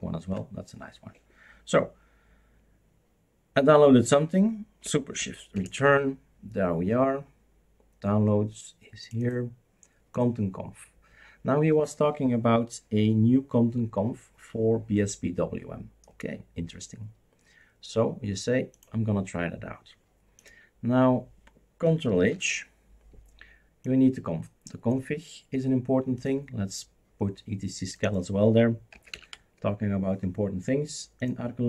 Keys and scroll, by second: 5.5 shift+super+Return, 22.3 ctrl+h, 28.6-29.6 typing.